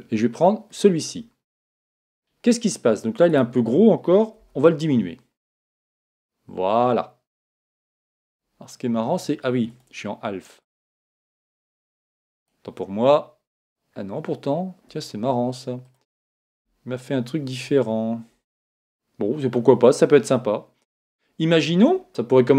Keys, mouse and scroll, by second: 1.8-4.4 middle drag, 3.3 right click, 4.4 s, 8.3-11.6 drag, 12.4 right click, 13.6 click, 18.5-20.3 middle drag, 20.9-21.9 scroll up 1, 21.9 scroll up 1, 22.0-22.5 middle drag.